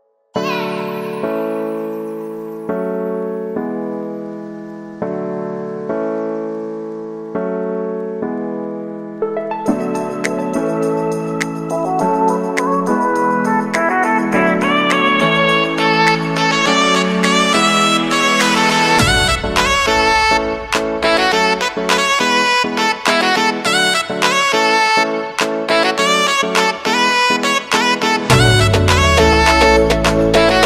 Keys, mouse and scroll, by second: 6.1 j, 6.5 space, 9.5 space, 10.0 click, 11.3 ctrl+a, 11.6-12.8 typing, 13.6-17.5 drag, 19.7 Return, 21.0 click, 22.6 Return, 23.2 space, 25.8 space, 27.2 click, 27.7 space.